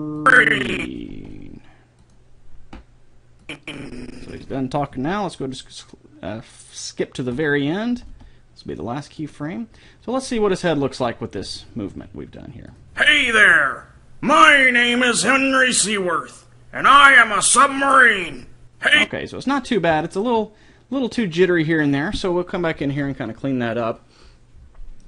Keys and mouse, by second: 0.7-1.9 drag, 1.0 r, 3.5-5.1 drag, 7.3-9.1 drag, 8.0 r, 11.5-14.4 drag, 18.9-20.5 drag.